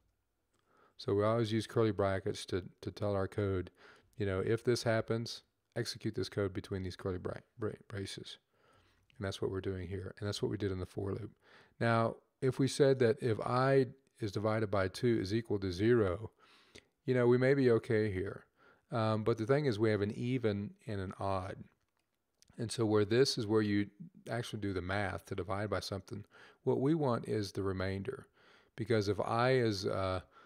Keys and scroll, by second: 2.1-2.8 typing, 10.7 typing.